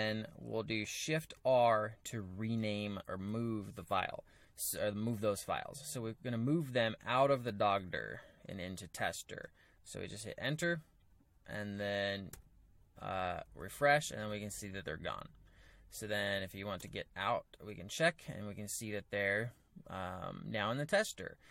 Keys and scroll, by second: 1.2 shift+r, 7.0-8.1 typing, 8.9 Return, 12.3 g, 13.6-21.5 typing, 16.7 Return.